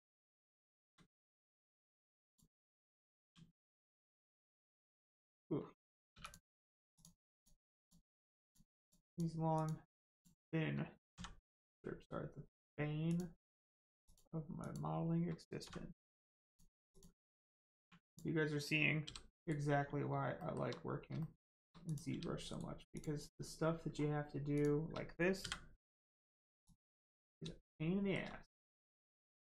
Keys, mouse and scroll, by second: 0.1 shift+middle click, 3.2 g, 4.9 right click, 6.1 3, 6.2 click, 8.3 click, 11.1 x, 13.1 click, 16.4 click, 17.7 1, 18.0 click, 19.0 g, 19.3 right click, 19.8 scroll down 1, 20.3 shift+middle click, 21.8 click, 22.1 g, 22.5 right click, 22.9 click, 23.9-24.2 scroll down 1, 26.6 click, 27.6 shift+middle click, 28.4 middle click, 28.5 middle click, 29.2 shift+middle click.